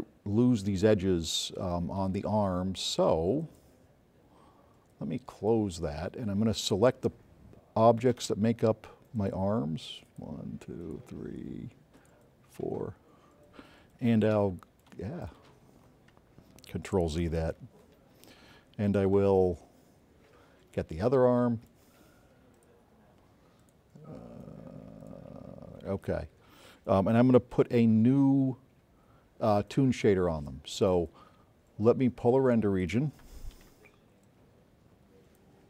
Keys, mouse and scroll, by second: 5.6 click, 7.5 click, 8.6 middle click, 9.0 middle click, 11.4 click, 12.3 shift+click, 13.0 shift+click, 14.2 shift+click, 16.6-17.2 right drag, 16.6 s, 17.5 click, 19.7 z, 21.7-24.1 right drag, 21.7 s, 24.8 shift+click, 25.8 shift+click, 27.3 shift+click, 29.9 s, 30.6-33.2 right drag, 34.7 click.